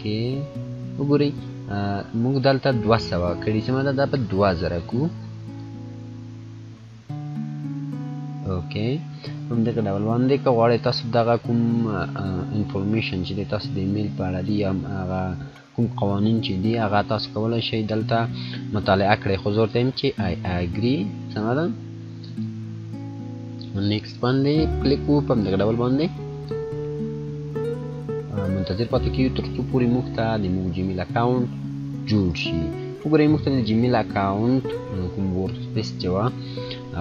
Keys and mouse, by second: 2.7 click, 3.2 click, 4.0 0, 5.4 click, 10.1 click, 10.3-20.1 drag, 20.4 click.